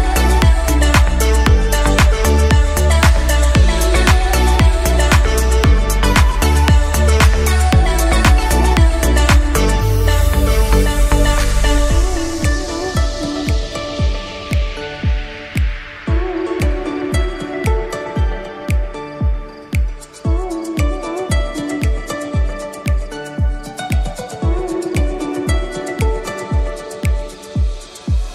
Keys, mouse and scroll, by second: 1.1 click, 2.7-3.9 middle drag, 3.9 KP_1, 4.6 Tab, 5.6 a, 6.5 g, 9.1 Tab, 9.6-11.3 middle drag, 11.3-12.7 drag, 12.7 Tab, 13.6-14.9 scroll up 2, 17.1 click, 17.5 middle click, 18.4-20.9 drag, 20.9-23.1 middle drag, 25.0 click, 25.2-27.1 middle drag, 27.1-28.2 scroll down 9, 28.2-28.3 drag.